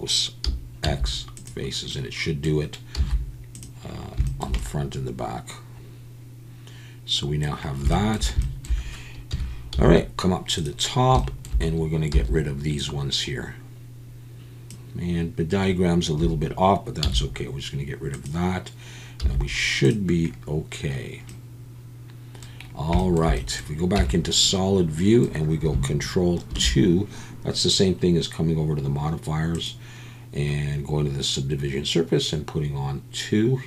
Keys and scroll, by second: 0.8 x, 2.9 z, 9.3 KP_1, 9.7 z, 12.1 c, 16.2 Escape, 17.0 x, 19.2 z, 24.0 Tab, 26.5 ctrl+2.